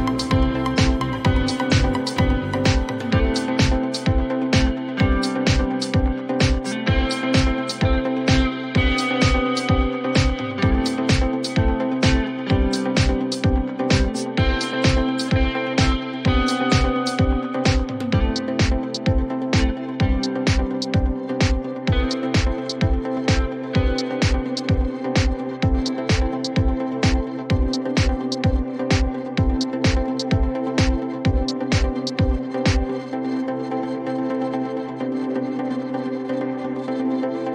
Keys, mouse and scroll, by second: 3.2 click, 7.0 click, 10.0 click, 10.9 click, 13.6 click, 16.3 click, 19.4 click, 21.8 click, 25.4 click, 28.2 click, 28.6-29.6 typing, 36.0 click.